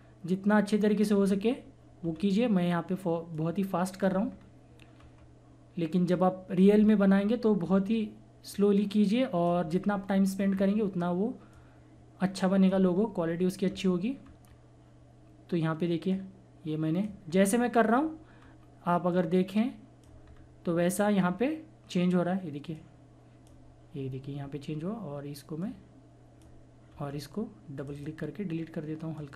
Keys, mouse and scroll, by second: 1.2 scroll down 1, 2.1 scroll up 1, 3.3 click, 4.3 scroll down 1, 4.9 scroll up 1, 6.1 click, 6.8 scroll down 1, 8.5 click, 9.6 scroll down 1, 10.5 scroll up 1, 11.5-12.9 drag, 12.9 scroll down 1, 14.3 scroll up 1, 14.5-16.1 scroll down 1, 16.1 click, 17.2 scroll down 1, 19.1 scroll up 1, 19.1 click, 20.2 scroll down 1, 21.3-22.7 scroll up 1, 22.7-26.8 drag, 26.8 scroll up 1, 27.7 click.